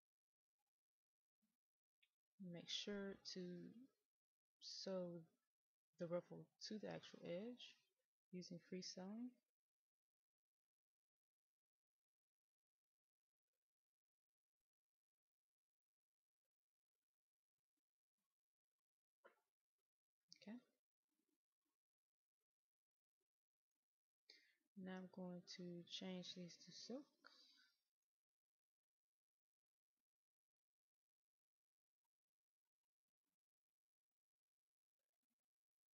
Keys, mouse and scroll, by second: 3.3 click, 9.7-12.1 scroll down 1, 12.1 click, 16.0 middle click, 17.5 click, 20.8-21.3 scroll up 1, 21.3-24.0 middle drag, 25.3 click, 29.3-32.1 drag, 34.1 click.